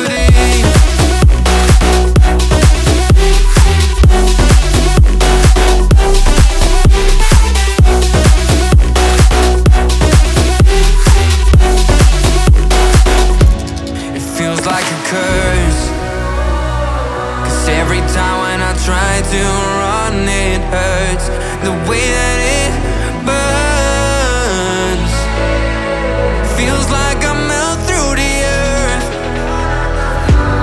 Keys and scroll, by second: 1.2 x, 23.6 x.